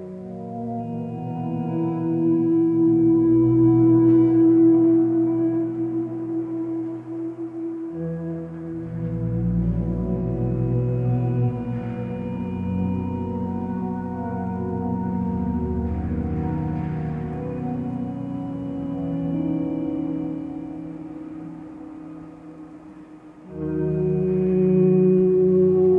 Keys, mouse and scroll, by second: 2.1 ctrl+t, 4.0 ctrl+space, 8.3 ctrl+space, 14.6 ctrl+;, 15.6 ctrl+space.